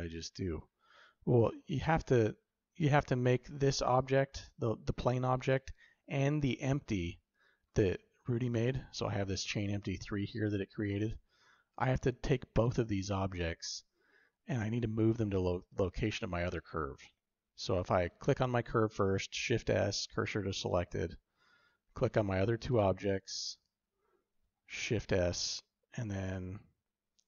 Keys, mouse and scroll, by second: 0.4-1.6 shift+drag, 1.6-2.7 shift+middle drag, 9.7 click, 12.4 click, 13.0 shift+click, 16.4 click, 19.2 shift+s, 20.2 typing, 22.5 click, 24.7 shift+s.